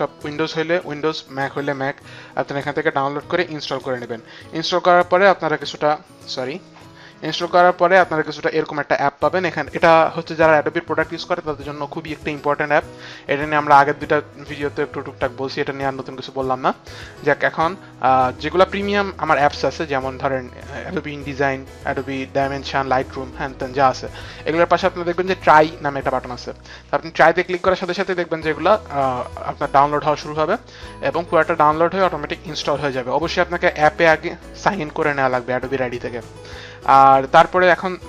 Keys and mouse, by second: 7.6 click.